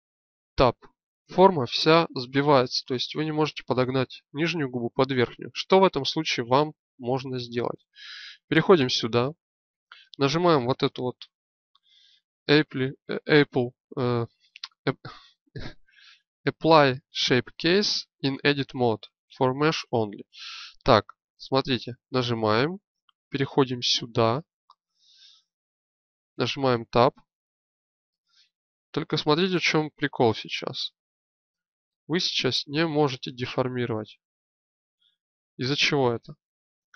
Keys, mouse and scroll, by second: 0.3 Tab, 5.7 Tab, 22.3-26.3 drag, 26.3 Tab, 28.0-29.4 drag, 31.3-32.3 shift+middle drag, 32.3 shift+click, 36.7 Tab.